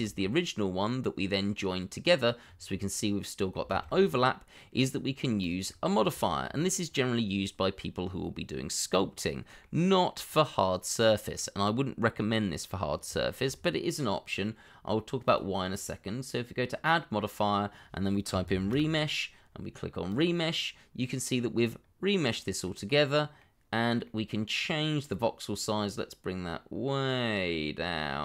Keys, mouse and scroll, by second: 0.3 shift+middle click, 2.4-2.7 scroll up 1, 2.7 middle click, 3.7 shift+z, 4.0 scroll down 1, 4.3 middle click, 5.1-5.6 scroll up 1, 5.6 scroll up 1, 5.7 middle click, 6.2 shift+middle click, 9.1 middle click, 11.6-12.0 scroll down 1, 12.1-12.4 scroll up 1, 12.4 middle click, 13.1 shift+middle click, 18.3 r, 18.5 e, 18.7 m, 21.1 middle click, 21.8 scroll up 1, 22.6 middle click.